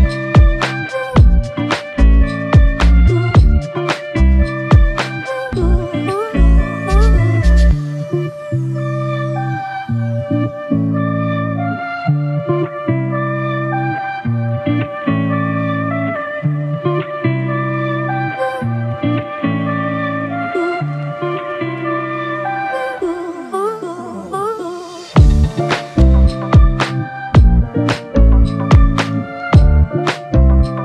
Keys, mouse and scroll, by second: 2.0 alt+click, 9.5 shift+click, 16.3 double click, 23.0 shift+click, 26.2 double click.